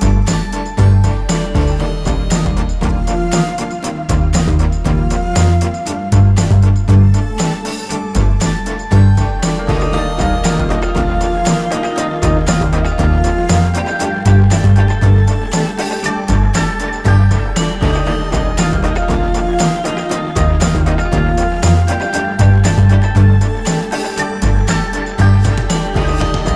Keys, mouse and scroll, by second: 3.4 ctrl+z, 4.9 click, 7.5 click, 8.2 alt+scroll down 1, 8.6-9.0 alt+scroll up 1, 9.4 click, 13.4 click, 15.1 alt+scroll down 1, 15.3-15.7 alt+scroll up 2, 15.6 alt+space, 16.2 click, 17.5-20.0 alt+shift+drag, 20.3 alt+scroll down 1.